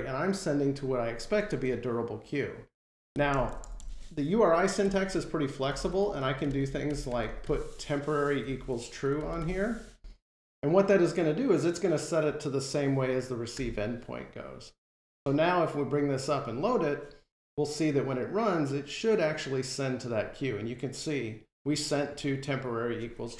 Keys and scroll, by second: 13.4 F5.